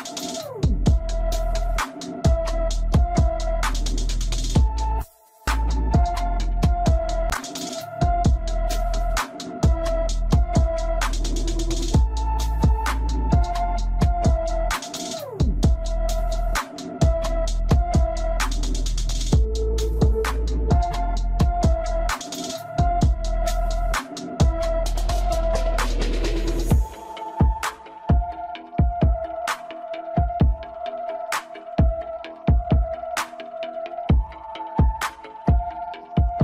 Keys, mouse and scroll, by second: 3.9-4.3 scroll up 1, 4.3-6.5 middle drag, 6.5-8.9 drag, 8.9-9.3 scroll down 2, 9.3-10.4 middle drag, 10.4-12.2 scroll up 1, 12.5-15.3 drag, 15.3-15.8 scroll down 1, 15.8 Tab, 16.5-17.7 middle drag, 17.7 shift+a, 18.5 click, 20.2-21.9 middle drag, 21.9-22.5 scroll up 2, 22.5 Tab, 23.6 scroll down 2, 24.2 Tab, 26.4 click, 26.7-27.0 scroll down 2, 27.0 scroll up 1, 27.1-28.3 middle drag, 28.3 click, 28.9-30.1 middle drag, 30.1-31.1 scroll up 3, 31.1-33.3 middle drag, 33.3-33.7 scroll down 1, 33.7-34.9 middle drag, 34.9 scroll down 2, 35.2 Tab.